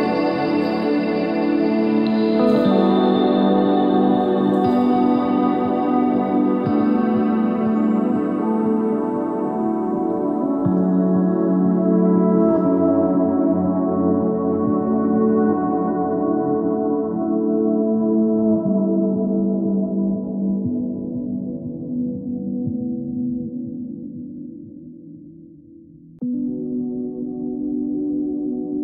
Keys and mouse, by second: 1.3 middle click, 1.5 z, 2.1 z, 2.4-4.1 drag, 5.5 click, 7.1 right click, 7.8 ctrl+j, 8.3 Tab, 8.5 a, 9.2 ctrl+n, 9.2 a, 9.5 Tab, 10.1 Tab, 21.4-23.0 middle drag, 25.8-28.3 middle drag, 28.3-28.8 drag.